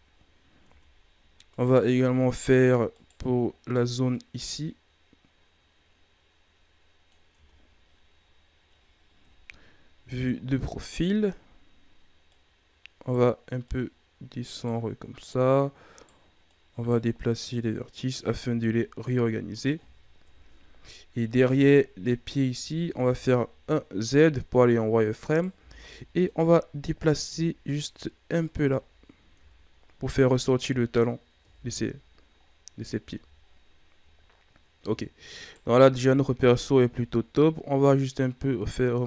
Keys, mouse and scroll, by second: 0.0 scroll up 8, 0.6 Tab, 0.9-1.5 scroll up 1, 1.5 right click, 1.8-2.9 scroll up 1, 2.9 shift+right click, 4.1-7.1 drag, 7.3 Tab, 8.1 scroll down 5, 9.2 KP_3, 10.3 scroll up 3, 11.0 Tab, 11.5-12.2 scroll up 2, 12.2 right click, 13.6 right click, 15.2 right click, 16.4 right click, 17.4 right click, 18.4 Tab, 18.6 scroll down 2, 19.0-20.2 middle drag, 20.2 KP_3, 20.9-21.3 ctrl+scroll up 7, 21.5 Tab, 22.5 z, 22.9-23.5 ctrl+scroll up 5, 25.2 right click, 25.5 b, 27.2 g, 28.5 z, 28.8 scroll down 3, 29.3 Tab, 29.8 scroll down 4, 31.3 KP_1, 32.4-33.4 scroll down 6, 33.4-33.9 shift+scroll up 8, 34.5-35.0 scroll up 1, 35.0 shift+scroll down 3, 35.4 right click, 35.8 Tab, 36.4 a, 36.7 a, 37.4-39.0 drag.